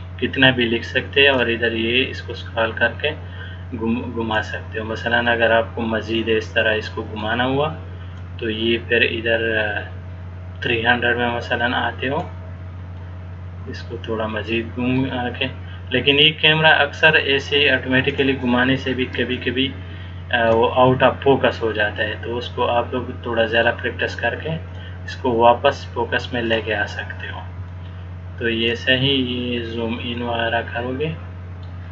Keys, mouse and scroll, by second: 1.6 click, 5.4 middle click, 8.4 click, 13.1 middle click, 16.3 click, 19.5 shift+middle click, 21.1 middle click, 24.9 click, 27.9 shift+middle click, 29.3-29.9 scroll down 3, 30.3 middle click.